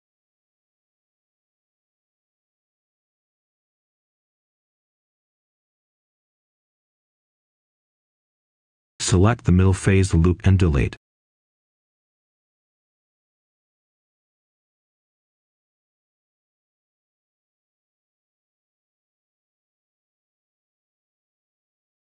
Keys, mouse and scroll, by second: 0.6-1.1 scroll down 1, 1.1 right click, 2.2-2.8 scroll up 1, 3.2-4.2 ctrl+shift+drag, 4.8-5.3 scroll down 1, 5.3 right click, 6.4-6.9 scroll up 1, 7.3 ctrl+shift+click, 7.3 scroll up 1, 8.2 ctrl+shift+click, 9.9-10.4 scroll down 1, 10.4 right click, 11.4-11.7 scroll up 1, 11.7-15.7 right drag, 16.0 Delete, 16.8-19.3 right drag, 19.3 Tab.